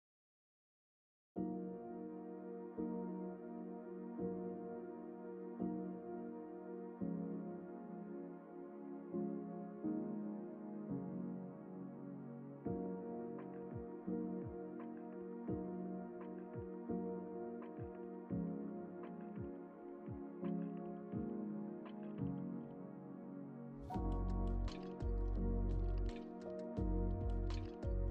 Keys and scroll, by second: 2.0 x, 22.9 ctrl+t.